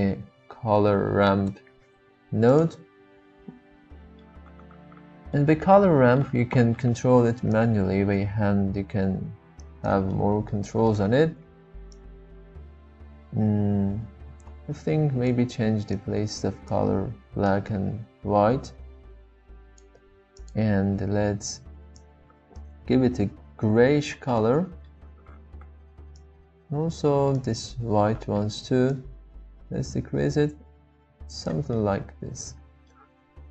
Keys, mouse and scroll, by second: 4.2-5.3 middle drag, 5.7-6.2 middle drag, 7.5-9.9 drag, 10.1 middle click, 10.7 shift+middle click, 12.1-15.3 drag, 16.0-17.4 drag, 17.6-19.9 drag, 20.4 click, 24.4 middle click, 26.4-26.9 drag, 31.7-32.9 middle drag.